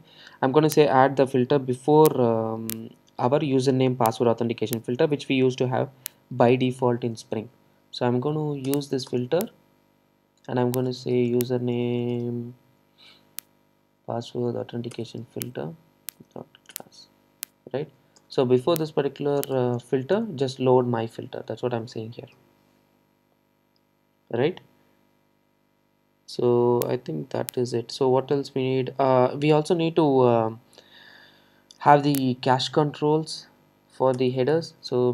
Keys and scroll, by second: 8.7 Return, 15.0 Return, 22.4 alt+super+l.